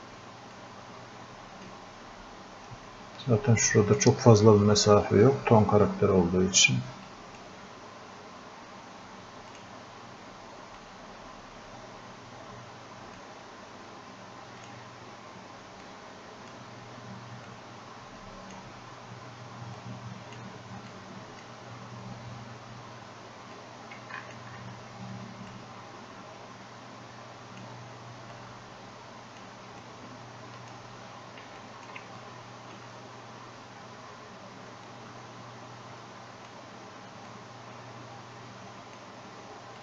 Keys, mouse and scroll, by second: 0.6-7.1 drag, 7.1-23.6 drag, 23.6-31.6 drag, 32.2-39.8 drag.